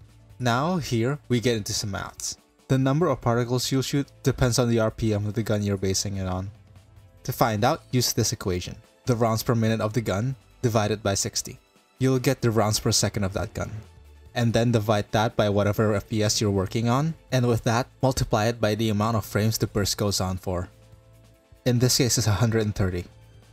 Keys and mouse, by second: 5.9-7.9 drag.